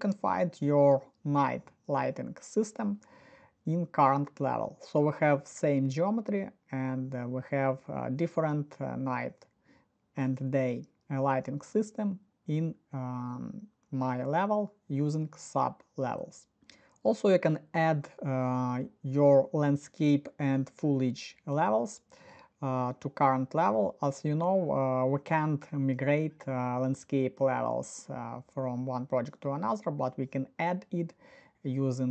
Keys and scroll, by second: 5.2 Escape.